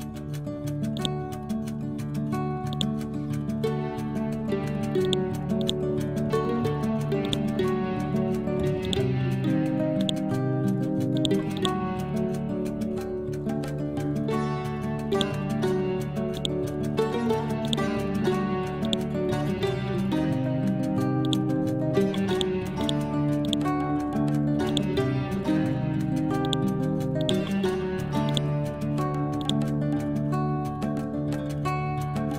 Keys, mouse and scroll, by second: 1.2-10.0 drag, 13.2 scroll down 1, 15.2-18.9 drag, 18.9 right click, 21.3 click, 24.7 right click, 26.5 click, 27.5 ctrl+z, 28.3-32.3 drag.